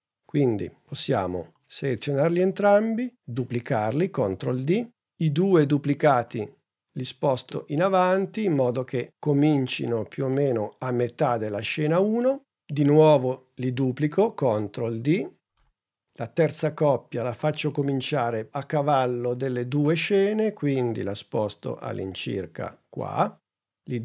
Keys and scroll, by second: 4.1 super+d, 14.4 super+d.